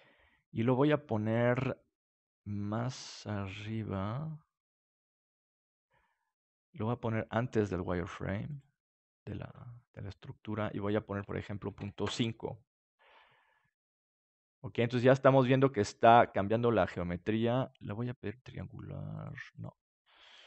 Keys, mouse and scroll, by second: 1.2-6.3 drag, 8.4-12.9 drag, 12.9-14.8 middle drag, 17.9-20.4 drag.